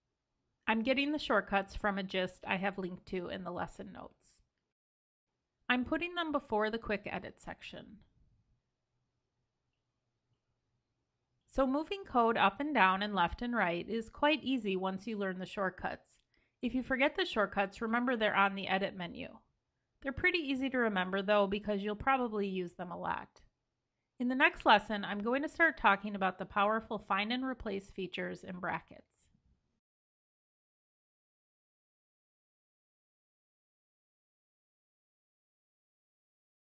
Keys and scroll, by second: 0.8 super+c, 5.1 shift+super+Return, 6.6 super+v, 7.4 super+s.